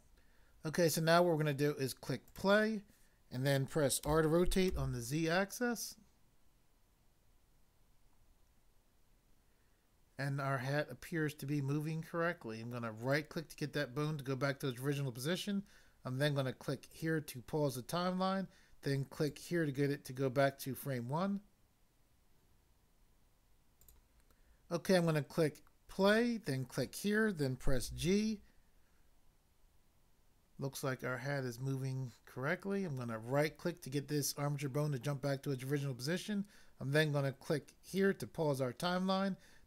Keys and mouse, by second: 2.2 click, 4.0 r, 4.7 z, 13.0 right click, 16.9 click, 19.1 click, 23.9 click, 24.0 click, 26.1 click, 26.7 click, 26.8 click, 27.9 g, 33.4 right click, 37.9 click.